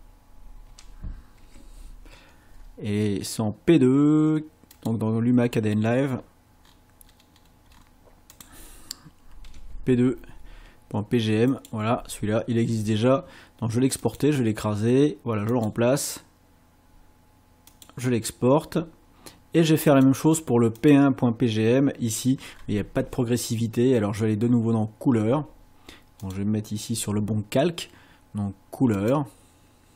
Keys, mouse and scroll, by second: 0.7 g, 1.4 m, 4.8 click, 6.1 scroll down 1, 6.6-7.6 scroll down 3, 8.3 click, 9.4 p, 11.5 click, 14.0 click, 15.6 click, 17.7 click, 19.9 click, 20.8 click, 26.2 click, 29.0 click.